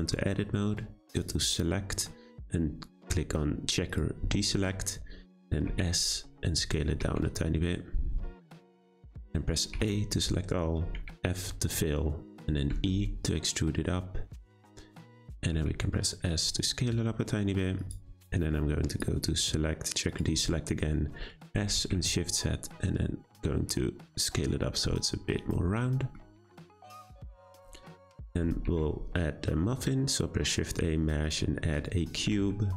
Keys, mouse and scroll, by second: 1.1-4.2 drag, 6.3 s, 9.7 a, 10.9 f, 12.7 e, 15.5 s, 18.9-21.4 drag, 21.4 s, 25.8-27.3 middle drag, 27.3 Tab, 27.5 click, 28.0-28.6 scroll down 1, 28.6 shift+a, 31.7-32.2 scroll down 1, 32.2 g.